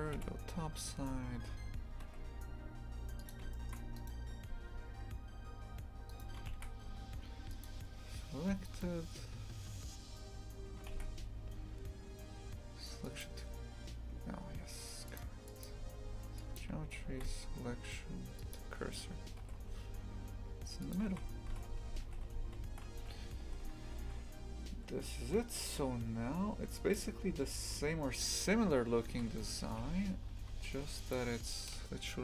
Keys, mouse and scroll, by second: 0.2 KP_Decimal, 1.4 g, 3.6 shift+middle click, 4.0 right click, 4.3 Tab, 6.1 right click, 7.7 shift+s, 8.3 Tab, 8.7-13.2 right drag, 13.2 shift+s, 16.6-18.5 drag, 18.5 shift+s, 19.5 g, 21.1 shift+f, 29.1 shift+f, 31.8 s.